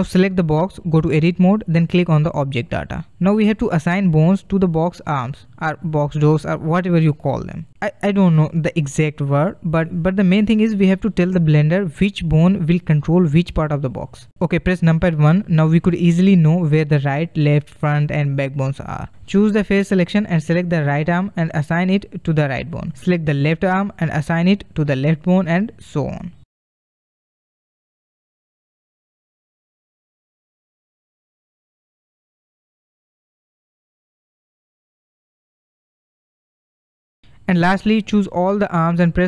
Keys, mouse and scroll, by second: 0.2 click, 1.2-6.4 drag, 11.8-12.6 scroll up 6, 12.6-14.0 drag, 14.0 middle click, 14.2 KP_1, 15.3-19.8 middle drag, 19.8 click, 20.2-21.2 drag, 22.4 click, 23.1-24.1 drag, 25.6-27.7 drag, 29.4 click, 30.4 click, 33.3 click, 34.0-35.0 drag, 36.2-37.4 middle drag, 37.4 shift+click, 38.0 shift+click, 38.8 shift+click.